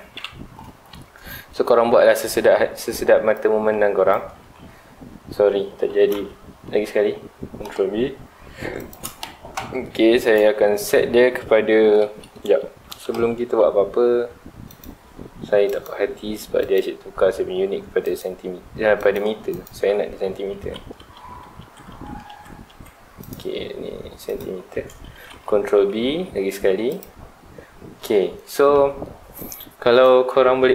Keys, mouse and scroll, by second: 0.1 KP_1, 0.8 shift+middle click, 1.2 scroll up 1, 3.3-4.4 drag, 4.4 ctrl+z, 8.9 shift+click, 10.2-12.1 drag, 12.1 Escape, 12.9 Tab, 14.6 click, 15.7 click, 16.6 click, 16.7 scroll up 1, 18.0-19.6 drag, 19.8 Tab, 21.1 ctrl+z, 23.2-25.3 drag, 25.3 ctrl+b, 27.0 click.